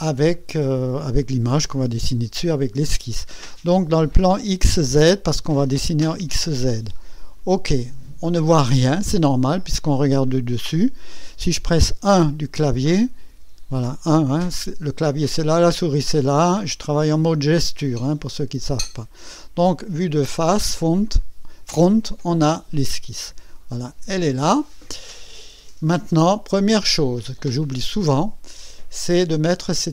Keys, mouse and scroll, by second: 5.6 click, 7.3 click, 13.3 KP_1, 22.8 scroll up 2, 23.5-24.5 right drag, 24.6 scroll up 2, 25.2 scroll down 2, 25.9 scroll up 2, 26.6-27.6 right drag, 27.8 scroll up 1, 28.5 scroll down 1, 29.0-29.7 right drag.